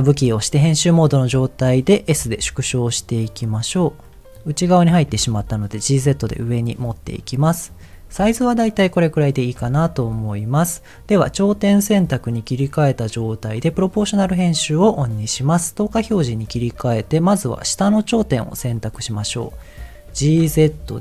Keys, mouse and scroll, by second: 0.2 Tab, 2.1 s, 3.4 click, 3.7-4.2 scroll up 4, 4.2 middle click, 5.1 g, 5.2 z, 6.3 click, 6.6 middle click, 6.8 scroll down 1, 6.9-7.4 scroll up 3, 7.4 middle click, 8.2 middle click, 9.5 Tab, 11.4 click, 13.6 click, 15.7 click, 16.2 middle click, 16.7 middle click, 17.4 click, 17.7 middle click, 18.0-18.5 scroll up 3, 18.7 middle click, 19.5 scroll down 2, 20.1 g, 20.4 z.